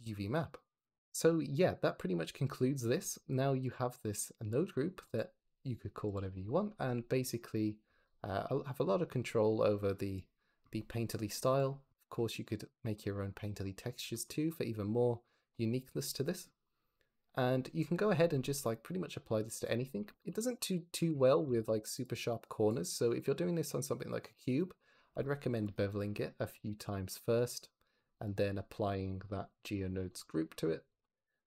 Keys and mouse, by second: 4.9 click, 5.9 click, 7.5 click, 8.1-10.3 drag, 11.1 click, 18.3 shift+a, 20.2 g, 20.5 y, 21.0 Escape, 21.3 g, 21.5 x, 21.8-24.4 drag, 25.6 middle click, 26.8-28.0 middle drag, 28.9 middle click, 30.3-30.9 middle drag, 31.1 middle click.